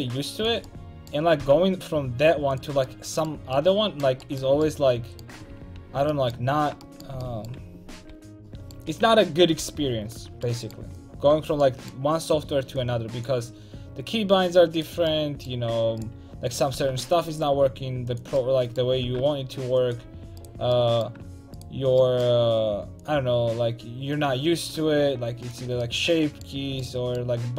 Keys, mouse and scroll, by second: 0.7-2.6 drag, 1.4 g, 2.7 click, 2.8 a, 4.9 g, 5.6 ctrl+z, 5.8 ctrl+z, 6.4 a, 8.1 l, 8.9 a, 9.6 l, 10.3 a, 11.4 l, 12.8-14.8 drag, 14.8 right click, 15.1 click, 15.7 a, 16.8 g, 18.2 click, 19.1 g, 20.1 a, 26.0 middle click, 26.7 a.